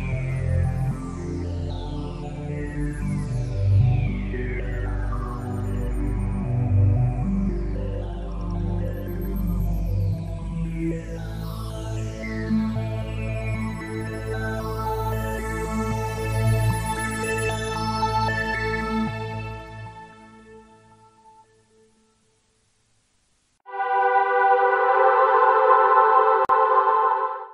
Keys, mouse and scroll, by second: 16.8 click.